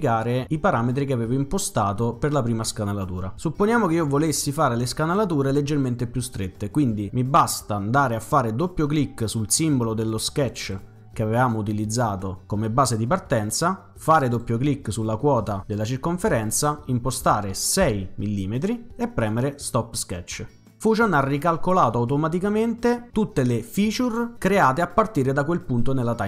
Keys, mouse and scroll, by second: 10.5 click, 10.7 click, 14.1 click, 14.3 click, 16.3 6, 17.2 Return, 19.5 click.